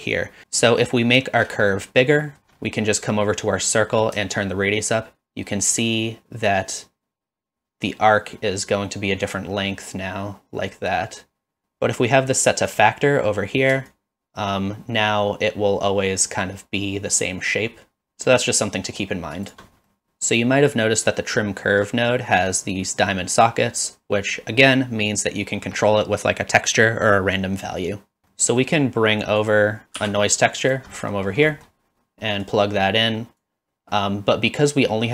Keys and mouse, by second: 1.8 middle click, 4.5-11.6 shift+drag, 12.7 click, 14.0-19.5 shift+drag, 23.4-23.9 drag, 28.4 middle click, 30.0 shift+d, 31.0 middle click, 31.6 middle click, 32.5 click.